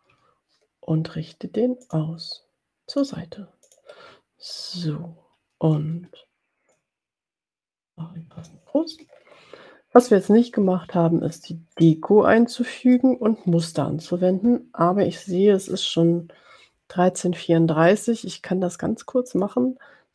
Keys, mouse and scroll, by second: 2.0-3.0 drag, 3.1 click, 4.0 click, 4.5 click, 6.8-8.3 ctrl+shift+drag, 8.6 click, 9.2-9.6 ctrl+scroll down 2, 10.4-11.5 middle drag, 11.8 middle click, 12.3-13.4 drag, 13.6 ctrl+scroll down 2, 19.6 click.